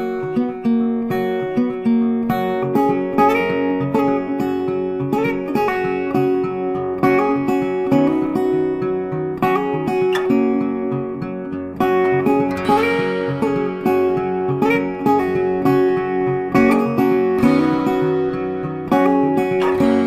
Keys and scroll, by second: 13.8 ctrl+d, 14.6 ctrl+d.